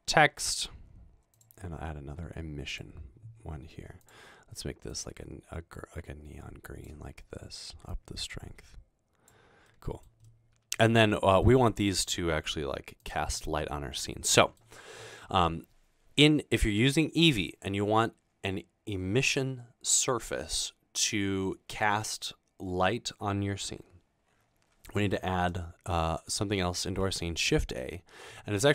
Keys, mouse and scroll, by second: 1.4 click, 5.0-7.0 drag, 8.0-9.3 drag, 9.7 middle click, 10.3-10.8 middle drag, 10.9-11.4 middle drag, 12.6 g, 27.1 a.